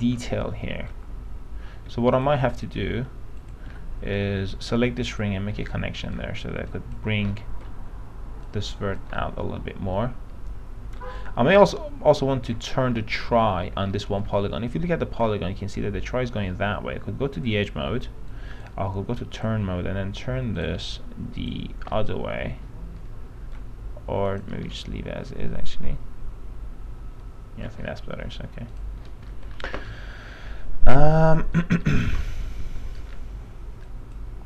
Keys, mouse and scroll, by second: 0.4 alt+middle click, 2.1 alt+2, 2.3 click, 3.6 shift+click, 5.3 click, 6.2 alt+middle click, 6.5 alt+1, 6.8 click, 7.5 alt+middle click, 8.6 click, 9.4-11.4 alt+middle drag, 12.4 alt+middle click, 13.2 alt+middle click, 13.8-14.1 scroll up 1, 14.2 middle click, 14.6 alt+middle click, 17.6 click, 22.1-23.7 alt+middle drag, 24.5 click, 24.9-27.8 alt+middle drag, 28.9 click, 29.5-29.9 scroll down 1, 30.1-32.0 alt+middle drag, 32.1 scroll down 1, 32.4 alt+middle click, 33.1 scroll up 1, 33.3-34.0 scroll down 1, 34.0 click.